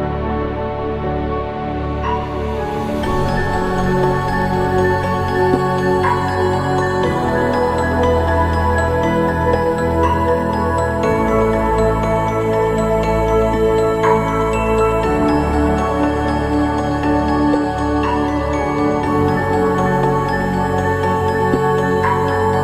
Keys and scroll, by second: 0.7 ctrl+=, 1.0 ctrl+=, 16.4 ctrl+=.